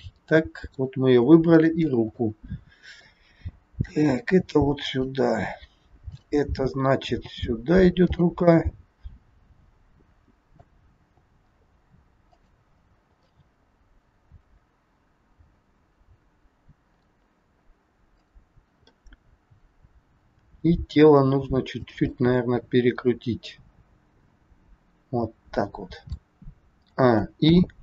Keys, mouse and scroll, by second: 1.5 shift+click, 2.1 middle click, 3.8 g, 6.0 click, 7.0 g, 8.6 middle click, 11.0 g, 12.7 scroll down 3, 13.3 middle click, 13.3 scroll down 2, 18.1 click, 18.9 middle click, 20.3 r, 22.1 middle click, 26.8 a, 27.4 i.